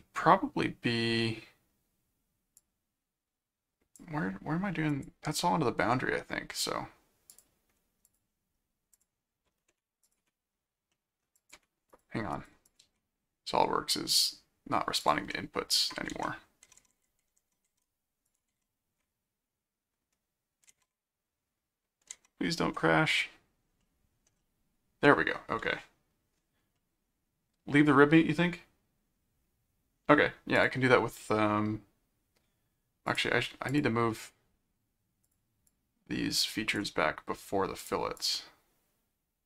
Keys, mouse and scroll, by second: 2.6 click, 4.2-4.5 scroll up 2, 4.9 click, 7.3 click, 8.0 click, 8.9 click, 10.0 click, 10.9 middle click, 11.4-13.2 drag, 12.8 ctrl+q, 15.0 click, 15.3 middle click, 16.1 alt+Tab, 16.7 alt+Tab, 18.2 ctrl+click, 18.8 ctrl+Tab, 21.0 ctrl+Tab, 22.1 ctrl+Tab, 23.8 middle click, 24.4 middle click, 26.7-27.9 middle drag, 30.5 click, 33.1 click, 33.7 click, 35.2-36.7 drag, 37.8-39.4 drag.